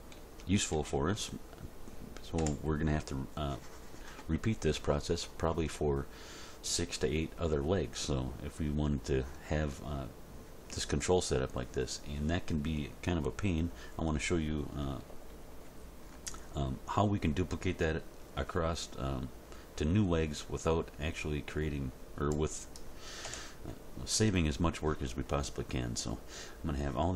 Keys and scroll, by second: 0.2 Page_Down, 0.7 End, 2.4 Home, 15.1 End, 23.3 Home.